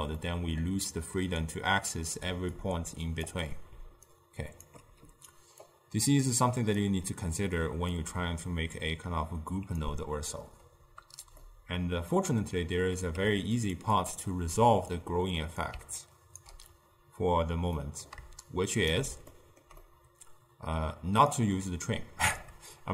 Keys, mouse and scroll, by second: 0.3-2.4 middle drag, 2.4-4.8 typing, 2.6 click, 4.1 right click, 5.7 click, 8.0-11.1 drag, 11.5-13.2 middle drag, 13.2 g, 14.0 click, 15.1 click, 16.1 ctrl+right click, 17.8 middle click, 18.6 shift+right click, 19.4-21.4 ctrl+middle drag, 21.4-22.9 drag.